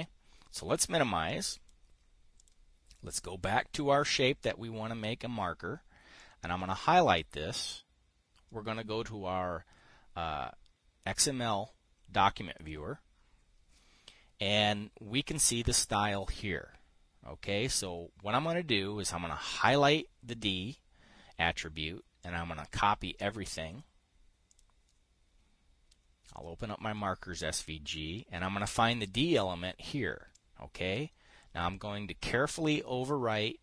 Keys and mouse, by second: 25.1-27.0 drag, 30.8-33.6 drag.